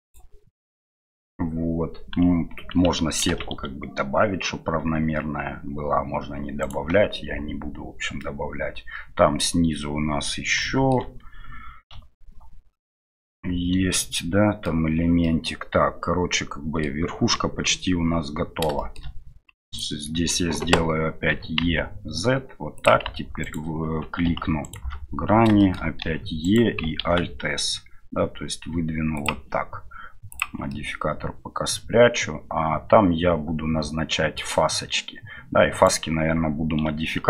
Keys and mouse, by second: 8.2-9.4 middle drag, 10.7 shift+middle click, 11.9 KP_Divide, 12.4 KP_Divide, 13.2-14.6 middle drag, 15.2-17.1 middle drag, 17.4 KP_1, 18.7 shift+middle click, 21.3 e, 23.4 alt+right click, 25.6 shift+middle click, 30.3 click, 30.7-34.6 middle drag, 35.7-37.2 right drag.